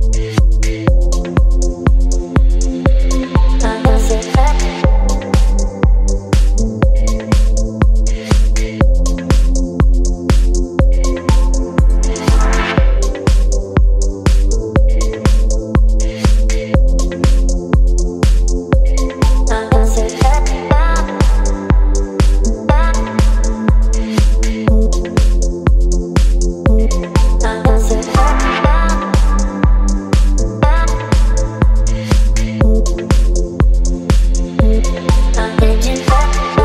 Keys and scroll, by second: 0.3 b, 2.4 x, 6.4 space, 10.6 t, 16.0-17.7 typing, 17.9 ctrl+a, 24.3 v, 29.6 e, 29.9 KP_7, 30.6 KP_6, 34.4 space, 35.2 ctrl+t.